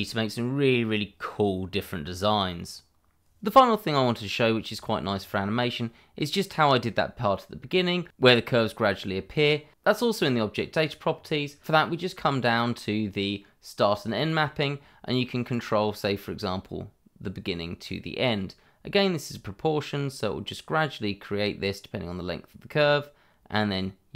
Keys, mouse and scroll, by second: 3.6 middle click, 6.5 middle click, 11.4 scroll up 1, 11.6-12.4 scroll down 1, 14.1 click.